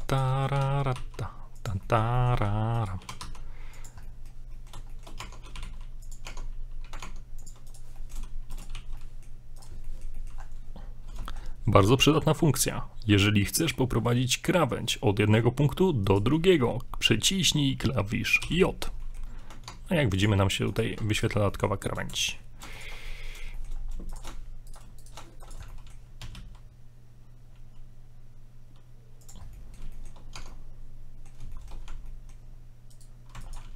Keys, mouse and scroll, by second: 0.1 right click, 0.3 middle click, 0.6 g, 2.0-2.4 shift+middle drag, 2.8 right click, 3.0 g, 4.1 middle click, 4.5 middle click, 4.9 shift+middle click, 5.2 Tab, 5.6 g, 6.3 Tab, 7.0 ctrl+Tab, 7.7 right click, 8.0 middle click, 8.6 shift+right click, 8.8 j, 9.0 middle click, 9.6 right click, 9.9 shift+middle click, 10.4 scroll up 4, 11.3 shift+middle click, 13.6 right click, 16.1 shift+right click, 18.5 j, 19.0 middle click, 19.7 ctrl+Tab, 20.7 right click, 21.1 ctrl+right click, 21.5 shift+middle click, 22.2 shift+right click, 22.7 ctrl+right click, 23.1 ctrl+right click, 23.1 middle click, 23.5 shift+middle click, 23.8 scroll down 2, 24.1 shift+right click, 24.7 ctrl+right click, 25.0 shift+right click, 25.4 ctrl+right click, 25.7 middle click, 26.2 s, 29.5 scroll down 2, 29.6 middle click, 29.9 shift+middle click, 30.2 scroll up 1, 30.4 Tab, 30.5 middle click, 31.5 shift+middle click, 31.9 Tab, 32.1 middle click, 32.9 right click.